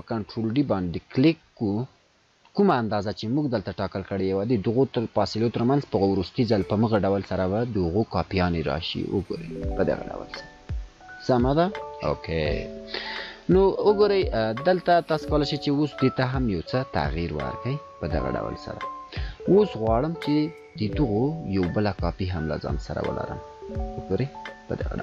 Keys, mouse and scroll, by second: 7.1 scroll up 1, 8.4 ctrl+scroll down 2, 9.8 scroll up 1, 13.7 scroll up 1, 15.4 Up, 16.5 scroll up 1, 17.3 Down, 18.0 scroll down 1, 22.1-25.0 alt+drag.